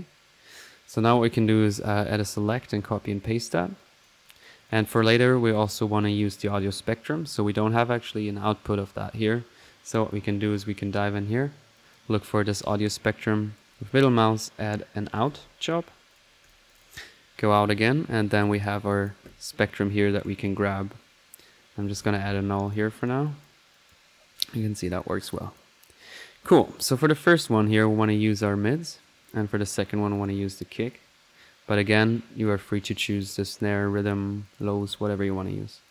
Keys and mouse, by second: 0.3-0.6 middle drag, 0.4-3.4 typing, 1.0 right click, 2.1 drag, 2.4 click, 3.3 ctrl+click, 3.8-4.2 ctrl+drag, 4.2 ctrl+right click, 4.4 ctrl+click, 5.5 drag, 5.8 middle click, 6.1 click, 9.0 middle click, 11.7-15.2 drag, 14.9-15.7 typing, 16.1-16.9 drag, 18.9 click, 20.2 right click, 21.7-22.4 typing, 22.7-23.9 drag, 24.9 middle click, 25.3-25.7 drag, 26.2 middle click, 26.5 click, 28.0-28.4 drag, 28.7 click, 29.2-29.8 drag, 30.1-30.7 drag, 30.9 click, 31.2 middle click, 31.7 click, 32.1-32.6 right drag, 33.0 click, 33.8 click, 34.4 click.